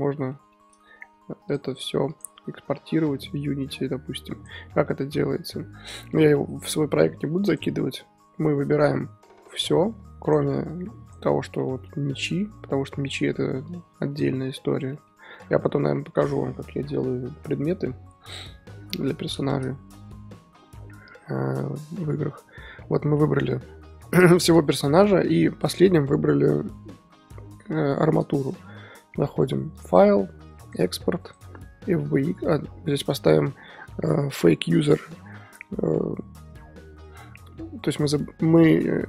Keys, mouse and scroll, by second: 1.5-2.7 drag, 2.7-4.3 middle drag, 4.3-5.3 drag, 5.3-5.9 scroll up 2, 5.9-10.3 middle drag, 10.3 click, 11.1 ctrl+click, 11.6-11.9 middle drag, 11.9-12.4 scroll up 1, 12.4-14.2 middle drag, 14.2 ctrl+click, 14.4 scroll down 4, 14.5 z, 14.9-15.7 shift+middle drag, 19.0-20.2 middle drag, 20.2-21.2 scroll up 2, 21.2-21.8 scroll up 1, 21.8-22.5 scroll up 1, 22.5-23.2 scroll up 1, 23.2-24.3 scroll up 1, 23.3-23.6 middle drag, 24.3-25.1 shift+middle drag, 25.1-25.8 scroll up 3, 28.5 middle drag, 28.8-29.6 scroll down 3, 29.6-30.5 scroll down 1, 30.5-31.2 scroll down 1, 31.2-31.8 scroll down 1, 31.8-32.4 scroll down 1.